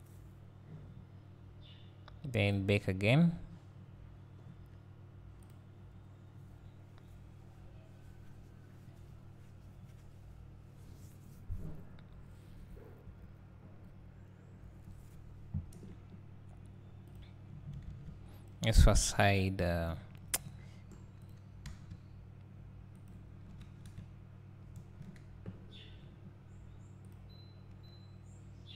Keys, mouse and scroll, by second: 8.9-17.2 drag, 19.3-19.9 scroll down 1, 19.9 `, 20.6 scroll down 1, 21.3 click, 21.7 s, 23.1 click, 23.5 KP_3, 23.8 KP_Decimal, 25.0 KP_0.